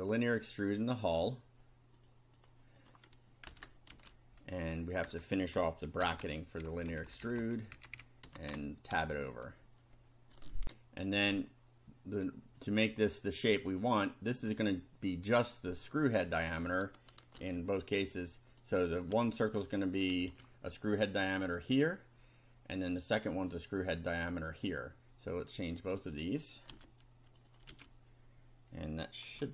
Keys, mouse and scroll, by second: 1.0 right click, 2.0 click, 2.4 click, 2.8 click, 3.5 Return, 3.9 ctrl+v, 5.0 Return, 6.0 shift+], 6.7 shift+Up, 7.7 Left, 8.2 shift+Left, 8.4 shift+Tab, 9.0 shift+Down, 10.6 ctrl+r, 11.5 click, 12.6-14.7 drag, 16.0 click, 17.3 ctrl+c, 18.5 click, 19.5 click, 20.2 ctrl+v, 25.7 click, 26.7 ctrl+c, 27.3 ctrl+click, 27.7 ctrl+v, 29.4 F5.